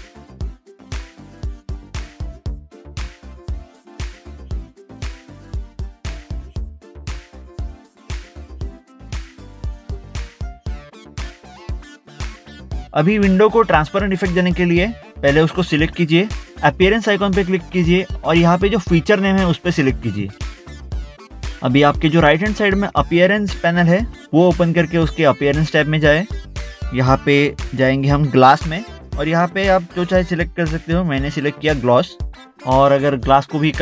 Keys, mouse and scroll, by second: 0.7 click, 2.4 click, 2.6 double click, 2.7 click, 3.2 scroll up 1, 3.4 click, 3.5 middle click, 3.6 click, 3.8 middle click, 3.9 scroll up 1, 4.0 middle click, 4.1 middle click, 4.2 click, 4.3 middle click, 4.7 middle click, 4.9 scroll down 1, 6.0 middle click, 6.2 middle click, 6.3 scroll up 1, 6.8 scroll up 1, 7.9 scroll down 1, 8.4 middle click, 8.8 middle click, 9.5 middle click, 10.9 ctrl+Tab, 12.0 scroll down 1, 12.7 middle click, 13.5 middle click, 13.7 scroll down 1, 15.0 middle click, 15.2 middle click, 15.6 click, 18.9 click, 25.7 click, 28.1 click, 29.2 scroll down 1, 29.3 click, 32.3 click.